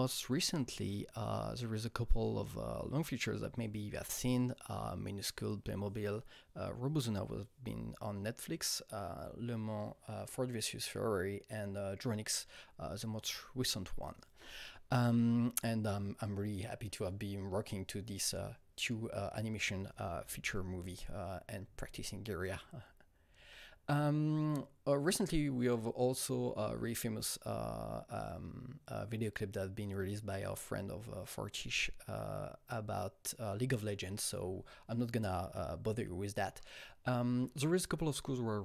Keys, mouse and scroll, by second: 0.4 Right, 23.3 Right, 36.4 Right.